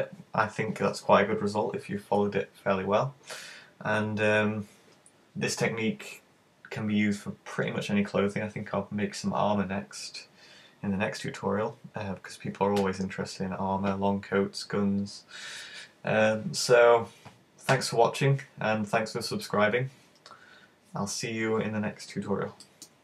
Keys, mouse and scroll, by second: 22.7 middle click.